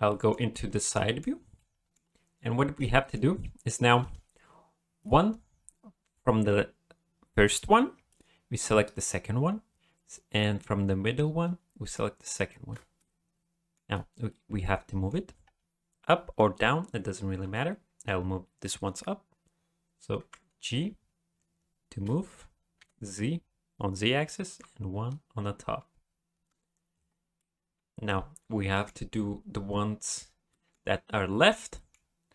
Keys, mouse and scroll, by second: 0.1 shift+middle click, 0.5 middle click, 1.5 middle click, 2.9 middle click, 5.0 click, 12.3 shift+click, 13.0 middle click, 14.3 middle click, 20.2 g, 27.4 middle click, 30.5 middle click, 31.7 middle click.